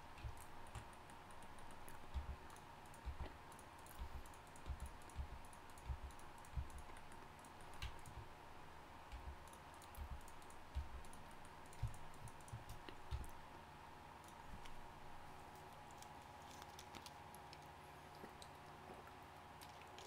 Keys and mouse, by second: 2.1-6.5 typing, 9.1 g, 10.0 g, 10.7 g, 13.1 f.